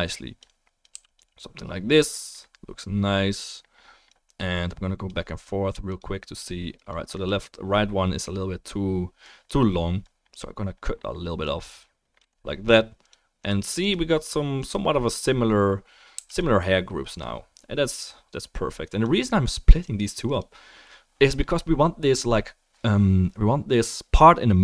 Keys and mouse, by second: 0.9 f, 1.1 click, 6.0 click, 6.4-6.8 drag, 6.8 middle click, 6.9 right drag, 7.1 middle click, 7.3-9.2 right drag, 9.2-13.1 middle drag, 13.1-13.4 right drag, 13.4-13.9 middle drag, 13.9 right click, 13.9 drag, 14.3 drag, 14.7-17.0 drag, 16.2 f, 20.0 click, 20.4-24.6 drag.